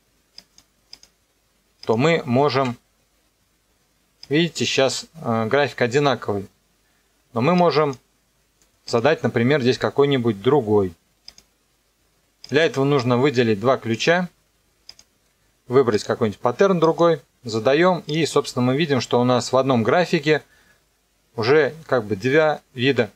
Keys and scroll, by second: 2.4 KP_0, 2.5 KP_Enter.